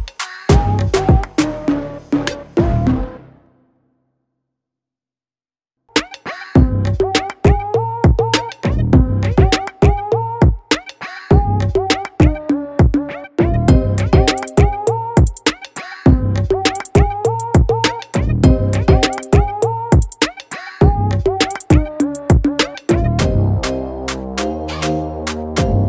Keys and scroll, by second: 0.2-1.0 [, 3.1-5.1 typing, 7.8 ctrl+z, 8.1 ctrl+z, 9.4-11.8 typing, 13.7 ctrl+z, 14.2 ctrl+z, 14.3 ctrl+], 14.5 ctrl+], 14.5 ctrl+], 14.7 ctrl+], 15.2 ctrl+-, 15.5 ctrl+-, 15.5 ctrl+0, 16.0 v, 17.4 ctrl+shift+n, 17.9 =, 19.5-20.3 typing, 22.0 ], 22.0 ], 22.1 ], 22.3 Tab, 22.9 ctrl+t, 23.3 Escape, 23.6 ctrl+shift+n.